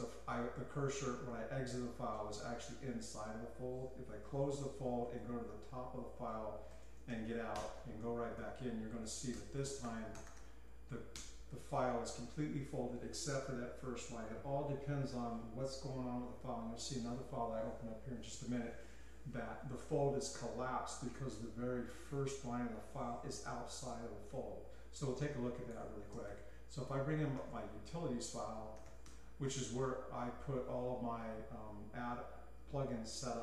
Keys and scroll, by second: 0.0-0.3 typing, 4.2-8.4 typing, 8.0 Escape, 9.3 Return, 9.4-11.7 typing, 26.2-29.5 typing, 31.0 ctrl+p, 31.0 typing.